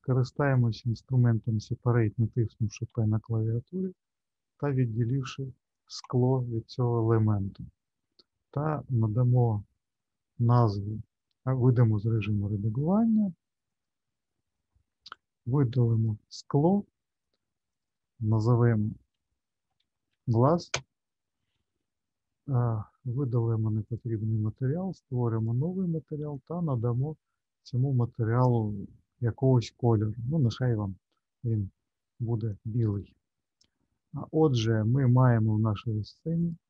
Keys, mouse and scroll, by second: 0.5 click, 2.8 p, 12.0 click, 15.0 click, 15.9 click, 17.7 click, 17.8 click, 20.2 s, 23.8 click, 25.3 click, 32.8-35.6 scroll down 1, 35.6-36.4 scroll down 1, 36.4 click.